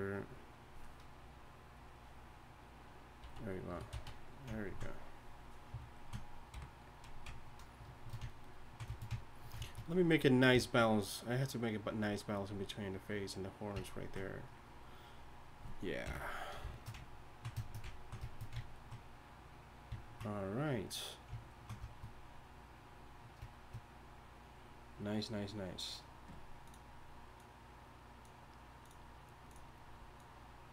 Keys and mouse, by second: 3.2 z, 3.7 a, 3.9 z, 6.5 KP_1, 16.0 KP_1.